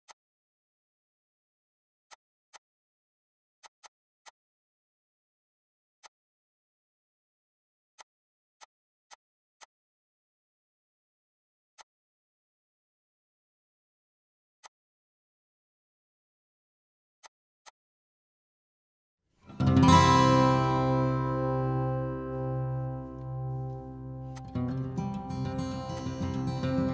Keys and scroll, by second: 16.0 h, 26.4 s.